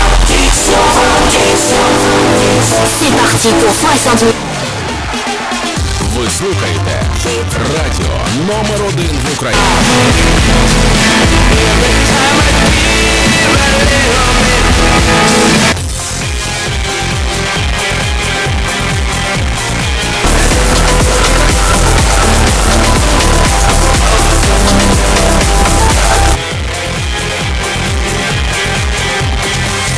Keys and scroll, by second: 4.3 Page_Down, 16.3 Page_Down, 26.3 Page_Down.